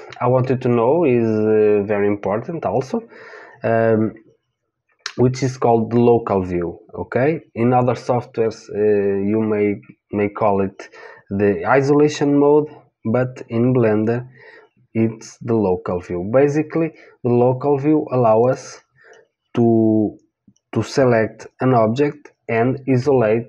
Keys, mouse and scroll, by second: 16.9-18.4 middle drag, 18.4 click.